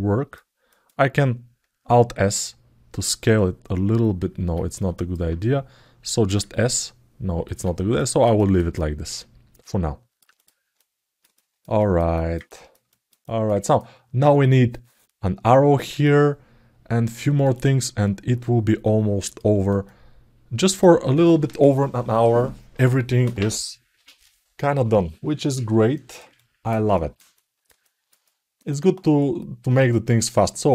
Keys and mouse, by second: 0.0 alt+middle click, 0.4 alt+middle click, 4.7 alt+middle click, 8.8 alt+middle click, 9.5 alt+middle click, 10.1 click, 11.9 alt+middle click, 12.2 ctrl+alt+middle click, 12.6 alt+shift+middle click, 13.0 alt+middle click, 13.3 ctrl+alt+middle click, 15.8-16.9 alt+middle drag, 17.1 alt+middle click, 17.3-19.5 alt+middle drag, 19.6 alt+middle click, 25.7 alt+middle click, 26.1 ctrl+alt+middle click, 26.7 alt+shift+middle click, 27.1 alt+middle click, 28.1 alt+middle click, 29.9 click, 30.6 alt+middle click.